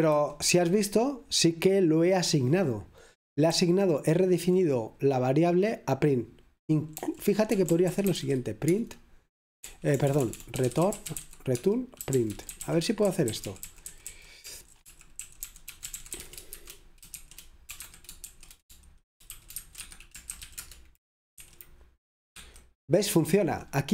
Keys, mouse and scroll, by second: 0.0-1.0 typing, 3.6-4.5 typing, 7.0 0, 11.2-18.3 typing, 19.4-20.6 typing, 22.4 typing.